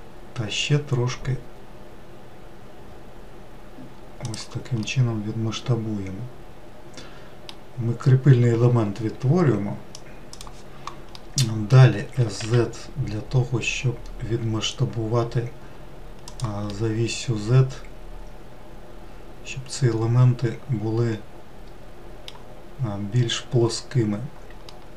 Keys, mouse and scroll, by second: 0.7 s, 5.0-8.1 middle drag, 11.2 middle click, 12.1 s, 16.7-22.8 middle drag, 22.8-24.1 scroll up 1, 24.1-24.7 scroll down 1, 24.7-24.9 middle drag.